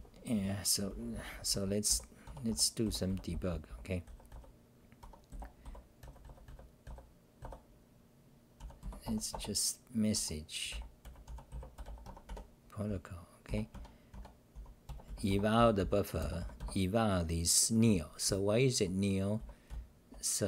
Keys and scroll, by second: 0.0-7.4 typing, 5.0 Home, 8.6 u, 10.1 Home, 10.4-11.8 typing, 12.0 Home, 13.2-16.6 typing, 14.1 Tab, 18.2-20.4 typing.